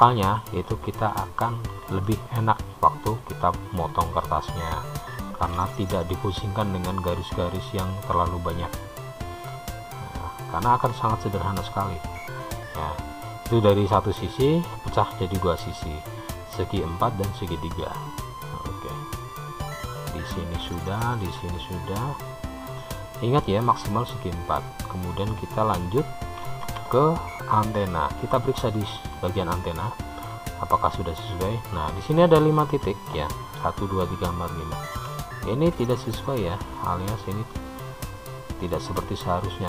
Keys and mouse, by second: 0.4 click, 3.1 shift+click, 6.0 k, 12.4 click, 13.1 middle click, 18.0-25.7 middle drag, 26.9 Tab, 27.6 click, 29.5 Tab, 30.9-32.7 middle drag, 37.8-39.1 shift+middle drag.